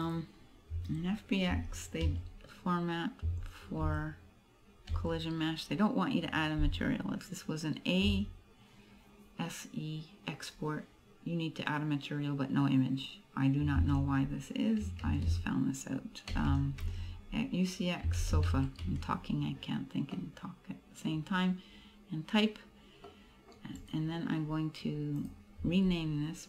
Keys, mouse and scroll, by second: 0.1 click, 16.6 BackSpace, 20.2 middle click, 21.3-23.2 scroll up 1, 23.2 middle click, 24.0 right click, 25.3 click.